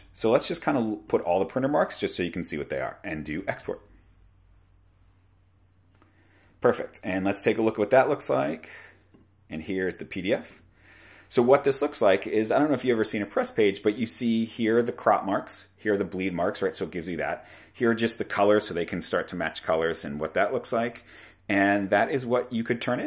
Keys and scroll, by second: 6.6 super+Tab.